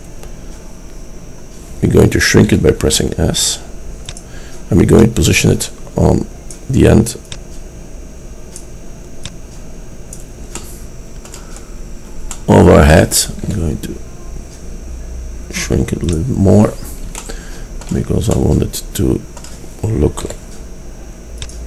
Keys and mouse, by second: 2.5 s, 5.0-5.9 drag, 7.4-8.7 drag, 10.7 middle click, 12.1-13.3 drag, 13.5 s, 20.4 s.